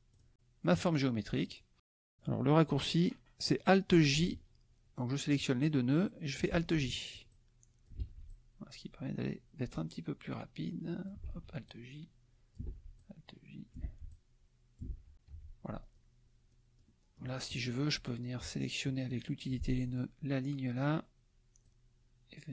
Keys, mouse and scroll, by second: 0.1 click, 1.4 click, 5.6 click, 6.5 alt+j, 7.3 click, 8.0 alt+j, 8.2-11.3 alt+drag, 11.2 alt+j, 11.6 alt+click, 12.6 alt+j, 13.0 alt+click, 13.8 alt+j, 14.1 alt+click, 14.9 alt+j, 15.3 F1, 15.8 click, 16.5 click, 17.2 click, 18.4 F2, 19.9 click, 21.6 click.